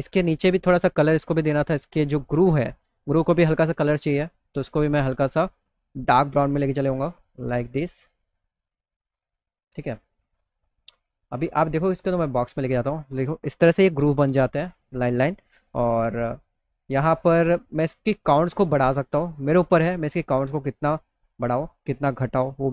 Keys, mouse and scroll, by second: 0.4 click, 2.2 click, 3.2 click, 3.6-4.4 scroll down 1, 4.4 scroll down 1, 4.9-5.3 scroll down 1, 5.3-6.5 drag, 5.7 right click, 7.0-8.2 drag, 7.0-8.2 right drag, 8.8 click, 10.4-11.4 drag, 17.1 click.